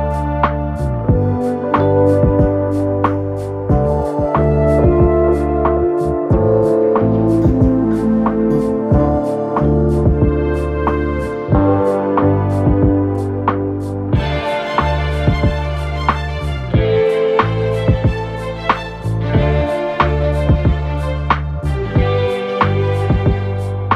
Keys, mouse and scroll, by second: 5.1-7.3 typing, 5.7-6.1 scroll down 1, 7.3-8.4 scroll down 1, 8.4 typing.